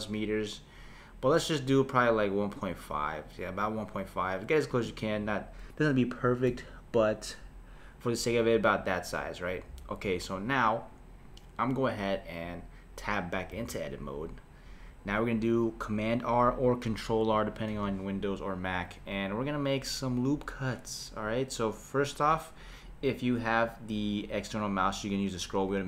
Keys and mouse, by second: 6.5 Tab, 13.5 Tab, 17.7 r.